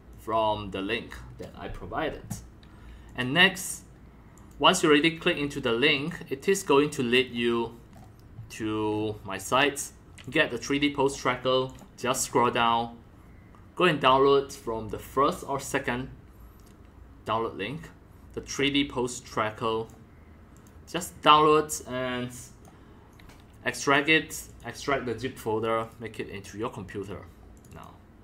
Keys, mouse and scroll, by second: 0.1-1.7 drag, 3.1 click, 4.3 click, 5.9 click, 6.6-6.9 drag, 7.1-8.9 scroll down 8, 8.9-10.1 scroll up 4, 10.1-10.8 scroll up 1, 10.8 scroll down 4, 11.1 click, 11.2-12.0 drag, 12.1 click, 12.1-14.3 scroll down 5, 14.3 scroll down 1, 19.2-24.2 drag, 24.5 click, 25.8 click, 27.5 click, 27.7 click.